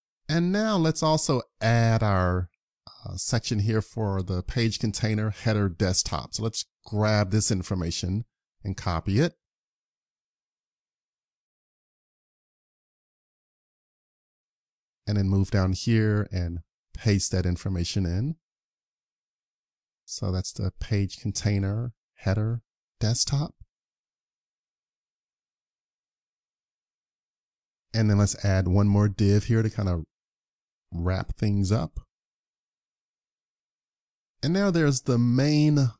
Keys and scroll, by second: 0.4 super+Tab, 10.1 super+c, 12.9 super+Tab, 18.3 super+v, 23.4 super+s, 31.3 super+s, 34.1 super+Tab.